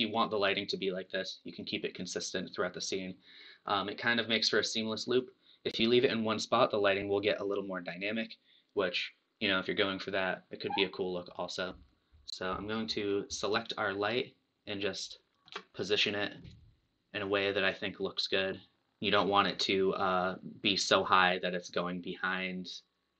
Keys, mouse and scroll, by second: 13.5 click, 14.6-15.3 scroll up 1, 15.3-16.7 drag, 15.3 shift+middle click, 16.5 middle click, 18.7 scroll up 1, 18.7 KP_3, 20.0 click.